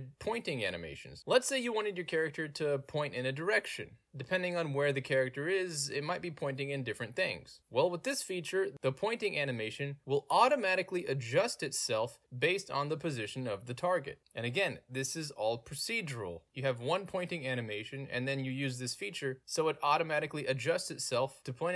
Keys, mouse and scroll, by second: 3.4 w, 8.6 a, 9.6 w, 21.4 d.